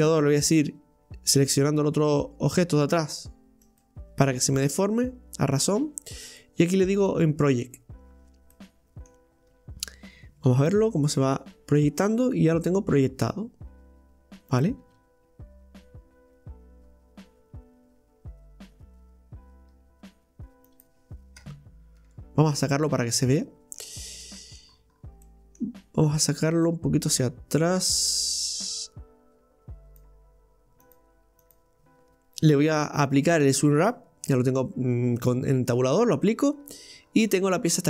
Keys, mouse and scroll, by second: 7.1-8.5 drag, 8.5 middle click, 9.4-10.5 scroll down 2, 10.5 g, 21.4 Tab, 22.0 Tab, 22.3 click, 22.9-24.7 middle drag, 24.7-25.3 scroll up 3, 25.3-26.9 middle drag, 26.9-31.7 drag, 31.7 right click, 35.2 Tab, 36.2 click, 36.6 Tab, 37.0-37.8 scroll up 4.